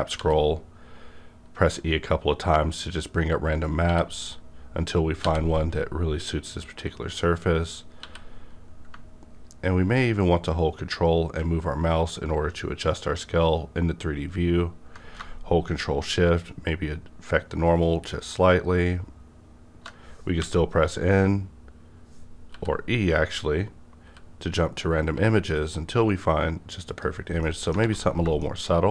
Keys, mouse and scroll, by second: 0.2 e, 1.7 e, 8.0 e, 20.3 typing, 22.5 e, 24.1 e, 26.9 click, 27.4 middle click, 27.8 alt+a, 28.4 middle click.